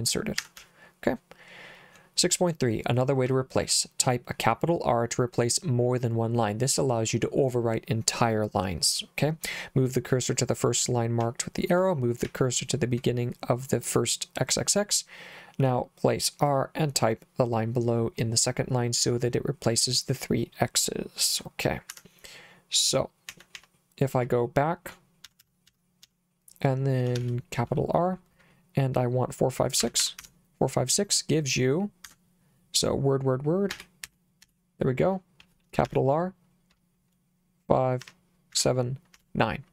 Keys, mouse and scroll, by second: 0.4 Escape, 0.6 j, 3.3 j, 11.2 j, 12.2 k, 21.9 Escape, 23.3 k, 23.6 k, 25.3 b, 25.4 b, 25.7 b, 26.0 b, 27.2 shift+r, 29.6-30.7 typing, 32.1 Escape, 33.7 w, 34.0 w, 34.4 w, 35.9 shift+r, 38.0 5, 38.5 7, 39.1 9.